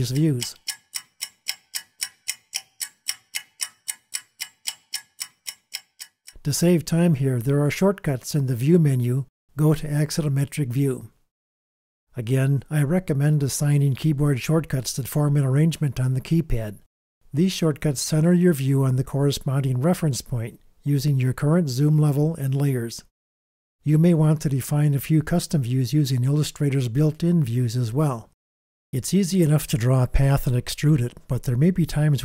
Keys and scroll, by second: 0.2 super+space, 1.4 space, 4.4 super+space, 19.3 alt+shift+super+KP_6, 21.7 shift+super+KP_5, 24.8 shift+super+KP_4, 25.4 shift+super+KP_6, 26.4 shift+super+KP_5, 28.3 shift+super+KP_6.